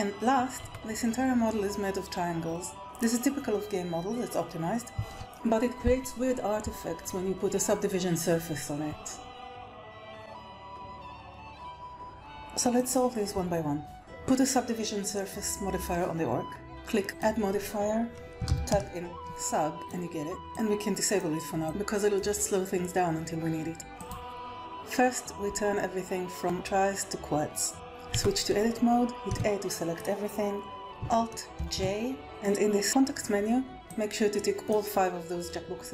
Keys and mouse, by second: 0.5 Tab, 11.4 BackSpace, 12.7 click, 17.1 click, 20.5 click, 21.6-24.0 drag, 27.7 alt+a, 27.7 Tab, 28.1 Tab, 29.2 a, 31.5 alt+j, 32.2 click, 33.8 click.